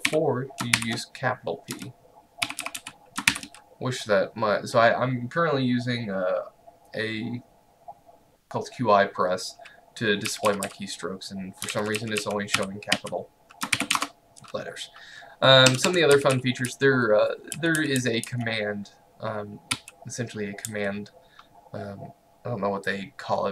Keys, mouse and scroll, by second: 0.0-0.8 typing, 2.3-3.3 typing, 10.3-14.5 typing, 15.7 Escape, 15.9-18.3 typing, 19.8-20.7 typing.